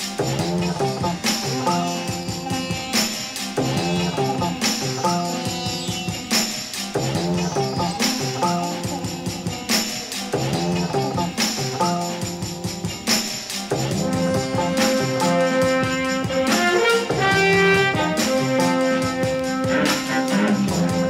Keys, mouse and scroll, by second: 0.6 drag, 0.8-4.3 typing, 1.0 click, 1.5 click, 2.1 drag, 2.7 click, 3.1 click, 3.3 click, 3.5-3.8 drag, 4.0 middle click, 4.6-5.1 middle drag, 5.2 Tab, 5.5-7.3 drag, 7.7 click, 8.5 g, 10.9 click, 11.6-12.5 typing, 12.5 click, 12.8 Tab, 13.0 click, 13.5 click, 14.1 middle click, 14.6 click, 15.5 middle click, 19.3 click, 19.8 ctrl+click, 20.6 click.